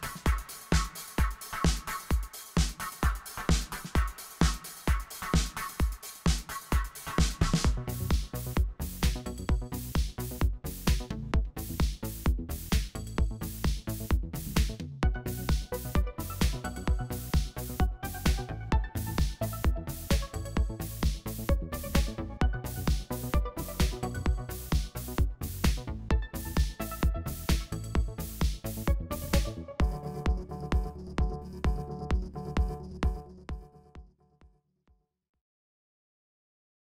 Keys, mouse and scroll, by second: 0.8 click, 1.0 scroll up 1, 2.4 click, 2.8-4.0 middle drag, 4.0 click, 5.1 click, 5.6 Tab, 5.8 click, 6.6 click, 8.9 KP_0, 9.5 click, 10.8 click, 11.5 click, 12.4 click, 13.5 click, 14.1 click, 15.6-17.6 drag, 21.8 click, 22.4 click, 23.6 click, 25.9-26.2 drag, 27.8 click, 28.5 r.